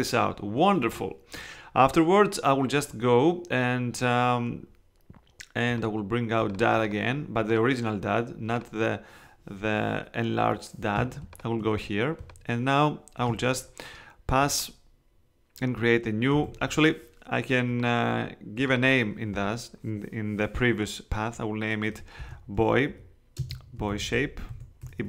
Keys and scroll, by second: 10.9 space, 16.4 super+z, 21.9-25.0 typing.